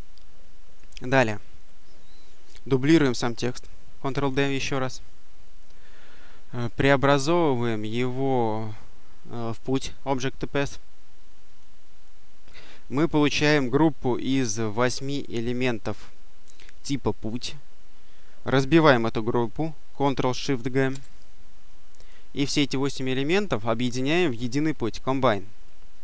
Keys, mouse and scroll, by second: 0.6 click, 4.0 ctrl+d, 7.6 click, 11.3 click, 20.7 ctrl+shift+g, 23.3 click.